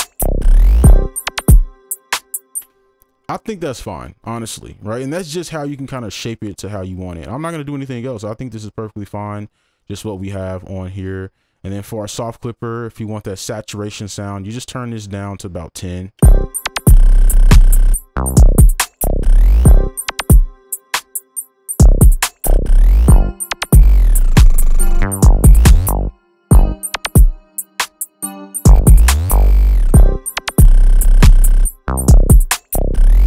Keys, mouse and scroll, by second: 2.6 space, 29.6 right click.